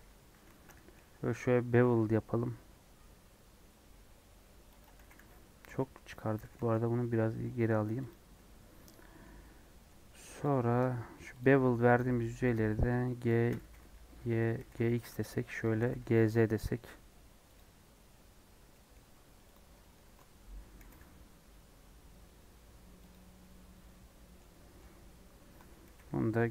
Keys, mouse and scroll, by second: 0.4 ctrl+b, 5.0 g, 5.7 x, 6.4 g, 8.4 scroll up 1, 8.7-10.4 middle drag, 10.4 click, 11.4 shift+click, 11.9 shift+click, 12.5 shift+click, 12.6 shift+middle click, 13.2 shift+click, 13.6 g, 14.6 g, 17.4 g, 17.7 scroll down 4, 18.3-18.7 scroll up 2, 18.7 middle click, 19.0 Tab, 19.5 click, 19.7 middle click, 20.0 Tab, 20.8 g, 23.3-24.9 middle drag, 24.9 scroll up 1, 25.5 Tab.